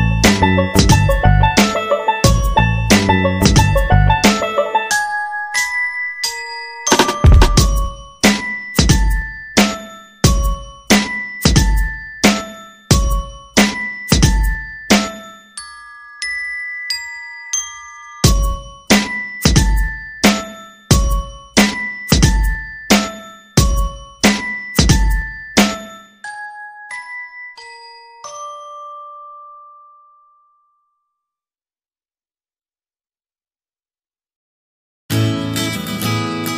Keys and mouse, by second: 0.8 r, 1.9 r, 3.0 middle click, 3.7 middle click, 4.2 middle click, 5.3 middle click, 6.0 r, 6.7 g, 8.3 middle click, 9.3 KP_7, 10.4 shift+middle click, 11.7 shift+d, 12.6 KP_3, 14.0 g, 15.2 r, 16.4 middle click, 17.4 middle click, 18.2 r, 19.3 middle click, 20.0 middle click, 20.5 g, 21.7 middle click, 22.4-23.9 middle drag, 24.0 KP_3, 24.7 r, 25.4 g, 27.2 KP_7, 27.7-28.7 middle drag, 30.7 shift+d, 32.0 r, 33.2 r, 35.7 g, 36.3-36.5 middle drag.